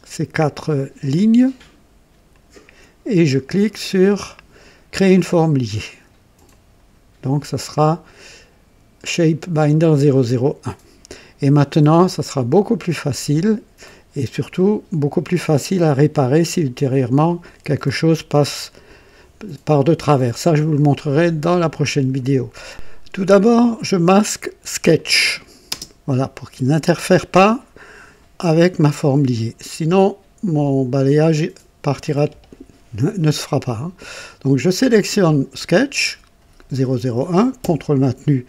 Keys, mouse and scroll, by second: 1.0 ctrl+click, 2.3 ctrl+click, 4.9 click, 6.4 click, 24.9 click, 25.7 space, 25.7 space, 34.5 click.